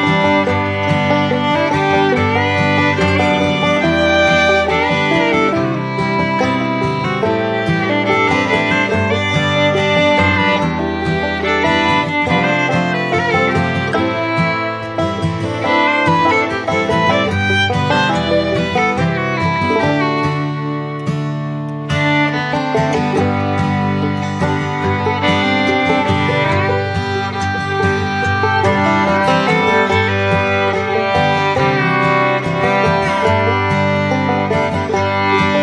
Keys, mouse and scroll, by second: 7.9 ctrl+z, 29.2-30.7 typing.